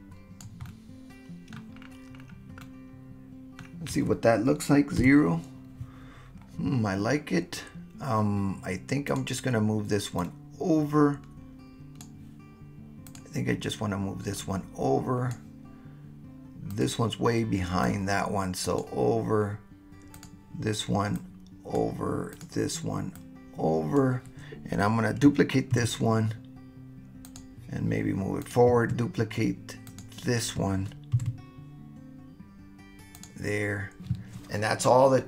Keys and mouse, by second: 0.7-1.5 middle drag, 2.6-3.7 middle drag, 5.0 KP_0, 10.2-12.0 drag, 14.4-15.3 drag, 16.7 click, 17.8-18.6 drag, 18.6 right click, 20.2 right click, 21.2-21.8 right drag, 22.3 right click, 23.2-24.0 right drag, 25.8 shift+d, 27.2 click, 28.4 click, 29.8 click, 31.1 shift+d, 33.2 click.